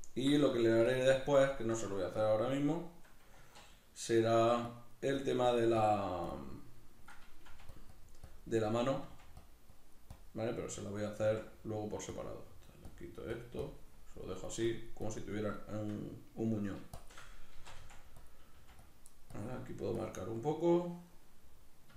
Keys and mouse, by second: 0.5 ctrl+middle click, 0.9-3.5 shift+drag, 3.5 alt+q, 4.7-7.5 drag, 7.5 f, 7.8-9.1 drag, 9.1 f, 9.5-11.2 drag, 11.2 f, 11.3 click, 11.4 f, 12.1 click, 13.7-15.7 shift+drag, 15.7-17.0 shift+middle drag, 17.0 shift+click, 17.5 shift+c, 18.3 click, 18.6 f, 18.9-20.4 drag, 20.4-21.9 middle drag.